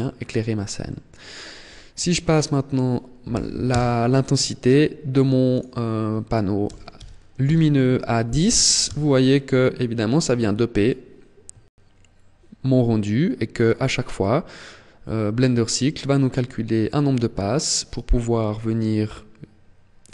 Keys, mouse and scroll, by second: 0.0 shift+middle click, 1.4 click, 4.6 click, 10.4 KP_0.